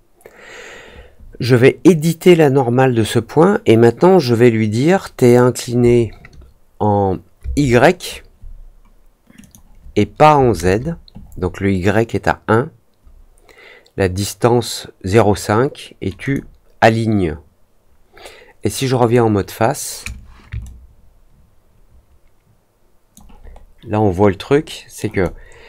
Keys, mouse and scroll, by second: 5.2 click, 9.3 click, 16.2 click, 18.9 click, 20.6-23.1 alt+drag, 23.4-23.9 alt+scroll up 2, 24.6 alt+middle click, 25.2 alt+click.